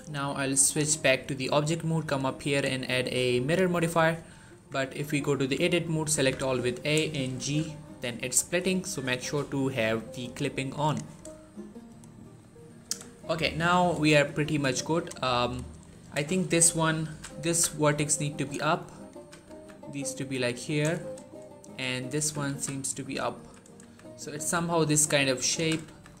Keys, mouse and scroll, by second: 0.0 click, 4.1 scroll up 1, 4.4 Tab, 6.0 a, 7.2 g, 8.3 right click, 10.6 click, 11.3 shift+middle click, 12.3-12.7 scroll up 1, 12.7 z, 12.9 shift+middle click, 13.1-13.8 shift+scroll up 2, 14.6 click, 15.7-16.0 scroll down 1, 16.2-16.5 shift+scroll up 1, 16.9-17.3 typing, 18.2 click, 19.0-19.3 typing, 20.5 click, 20.9 shift+middle click, 21.1-21.6 scroll up 1, 21.6 click, 22.0 g, 22.3 z, 23.1 click, 23.7 z, 24.3 z, 25.2 click, 25.4-26.2 typing, 25.8 right click.